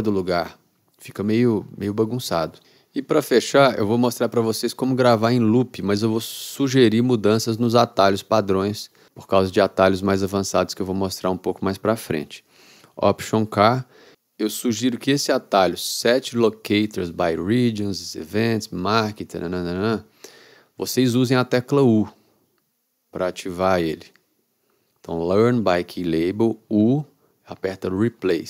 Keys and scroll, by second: 13.6 alt+k, 26.8 u.